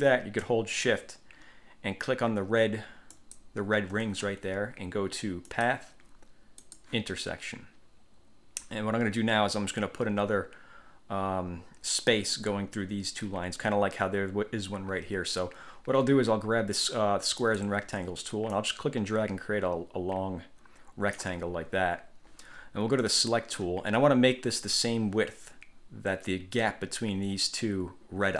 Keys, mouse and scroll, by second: 3.3 shift+click, 5.7 click, 6.8 click, 17.6 click, 18.7-21.5 drag, 23.2 click.